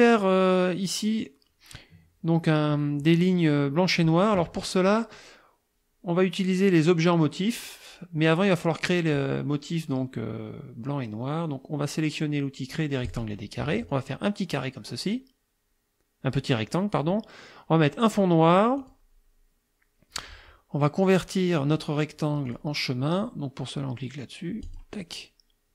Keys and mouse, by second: 13.1 click, 14.0-17.2 drag, 18.8 click, 22.5 click, 24.7 click.